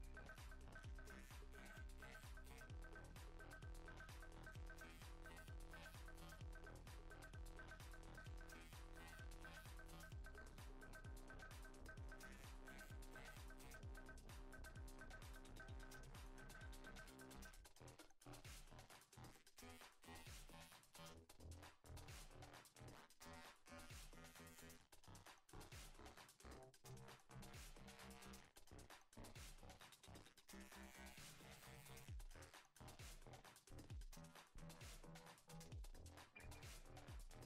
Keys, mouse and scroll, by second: 1.8 KP_1, 2.3 click, 4.1 middle click, 4.7 scroll up 1, 8.4 click, 9.4 f, 9.9 g, 10.6 click, 10.9 click, 11.5 click, 13.6 ctrl+z, 14.4 click, 17.7 ctrl+z, 17.7 middle click, 17.8 scroll up 2, 18.0 click, 19.8 middle click, 20.4 click, 22.2 shift+click, 22.4 shift+click, 22.5 scroll down 3, 22.6 middle click, 23.2 scroll up 3, 23.3 shift+middle click, 23.8 scroll up 2, 24.0 scroll down 1, 24.2 click, 24.2 scroll down 1, 24.9 scroll down 1, 25.0 middle click, 25.3 middle click, 25.8 click, 31.9 middle click, 32.1 scroll down 2, 32.2 middle click, 32.7 middle click, 33.3 scroll up 2, 33.4 shift+middle click, 33.6 middle click, 33.9-34.4 scroll up 4, 34.4 click.